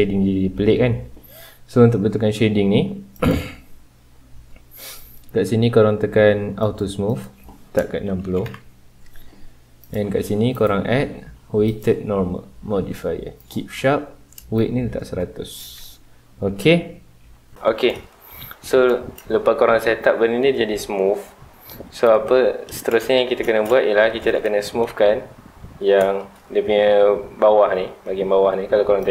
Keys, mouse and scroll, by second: 0.0-3.1 middle drag, 3.1 click, 4.9-6.7 drag, 7.0-8.5 drag, 8.5 KP_Enter, 9.8 click, 10.5-13.5 drag, 14.5-17.5 drag, 17.5-18.7 shift+middle drag, 18.7 scroll down 2, 18.9-21.2 shift+middle drag, 21.2 scroll up 2, 21.6-26.3 middle drag, 26.3-28.1 scroll up 2, 28.1-29.1 scroll up 1.